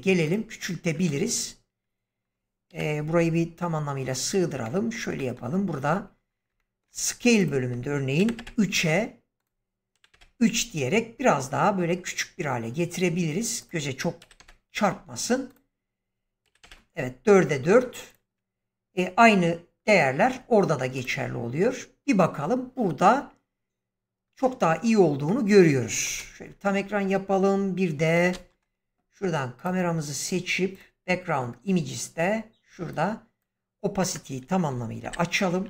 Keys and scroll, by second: 2.6 ,, 8.1 3, 8.3 Return, 9.9 3, 10.0 Return, 14.1 4, 14.3 Return, 16.4 4, 16.5 Return, 26.1 ctrl+space, 34.9 shift+Left.